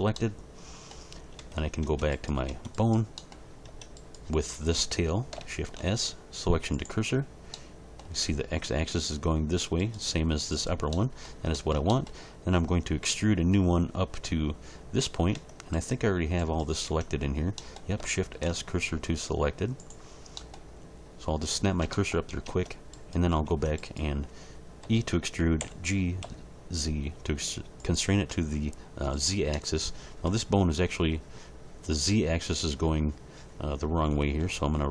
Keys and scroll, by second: 1.4 Tab, 5.6 shift+s, 15.3 Tab, 16.8 Tab, 18.3 shift+s, 22.4 Tab, 24.8 e, 25.6 g, 26.2 z, 34.4 ctrl+r.